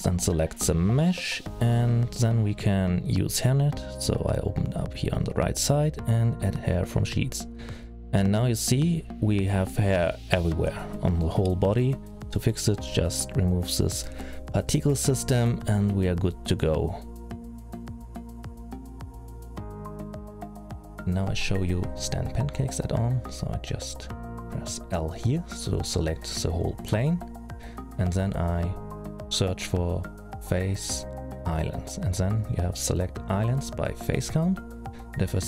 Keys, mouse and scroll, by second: 4.3 click, 6.0 click, 7.1 middle click, 9.9 click, 12.3 click, 13.5-14.1 scroll up 2, 14.1 middle click, 15.1-15.8 scroll down 5, 15.8-16.6 scroll up 2, 16.7 middle click, 20.2 alt+a, 20.6 middle click, 21.4-22.4 scroll down 5, 21.9-22.4 scroll up 3, 22.4-23.6 scroll up 5, 24.3 l, 25.1-26.0 scroll down 3, 27.4 F3, 35.2 middle click.